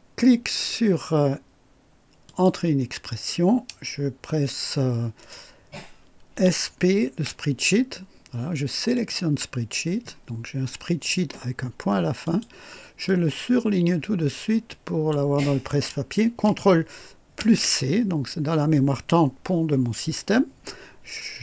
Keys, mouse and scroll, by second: 2.3 click, 6.3-7.2 typing, 9.0 click, 12.2 click, 13.1-15.3 drag, 17.4 ctrl+c.